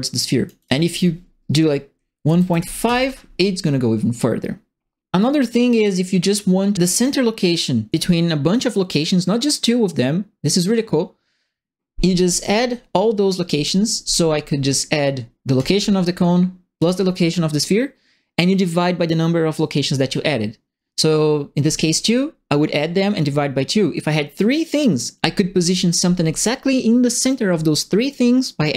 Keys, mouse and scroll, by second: 0.6 click, 2.2 KP_1, 2.3 KP_Decimal, 2.5 KP_5, 2.8 KP_Enter, 15.5 click, 16.7 click.